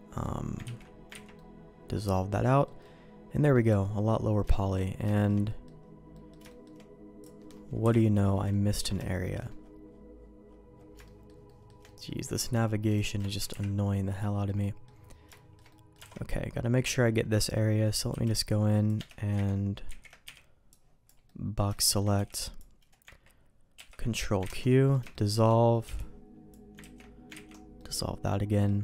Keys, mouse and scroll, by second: 0.6 ctrl+q, 1.2 ctrl+x, 1.3 middle click, 2.3 middle click, 2.8 middle click, 4.4 shift+middle click, 5.0 shift+middle click, 5.4 middle click, 6.1 middle click, 6.4 shift+middle click, 7.1 click, 7.7 KP_Decimal, 8.4 ctrl+middle click, 9.0 shift+middle click, 11.0 shift+middle click, 11.4 shift+middle click, 11.8 middle click, 12.8 click, 13.4 KP_Decimal, 14.4 middle click, 15.3 shift+middle click, 15.6 middle click, 16.0 alt+a, 16.9 middle click, 18.0 n, 18.2 click, 18.9 Escape, 19.8 ctrl+z, 20.2 b, 21.2 middle click, 21.7 shift+middle click, 22.1 b, 23.7 ctrl+q, 24.5 ctrl+x, 24.6 middle click, 25.0 shift+middle click, 25.8 b, 26.7 ctrl+q, 27.3 ctrl+x, 27.8 middle click, 28.7 Tab.